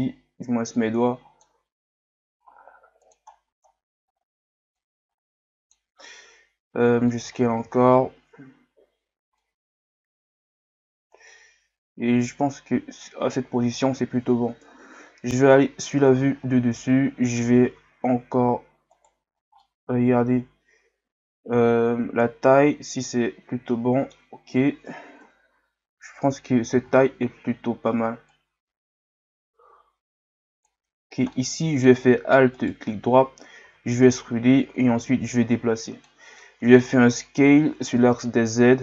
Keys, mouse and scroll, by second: 0.0 scroll up 2, 0.8-1.8 drag, 1.8 s, 3.3-3.7 scroll down 2, 4.0-4.7 scroll up 2, 4.7 scroll up 1, 4.8-6.1 drag, 6.1 s, 7.3-8.0 scroll down 4, 8.0-8.4 scroll up 1, 9.4-12.5 drag, 13.3-14.0 scroll down 2, 14.0-14.6 scroll down 1, 14.6 KP_7, 15.9-17.8 scroll up 2, 17.8 s, 19.3-19.6 scroll down 1, 19.6-22.6 middle drag, 25.2 KP_7, 26.0-26.9 scroll up 1, 28.3-31.3 drag, 31.3-32.5 middle drag, 32.5 alt+right click, 35.0-36.4 drag, 36.4-38.0 middle drag, 38.0 KP_1.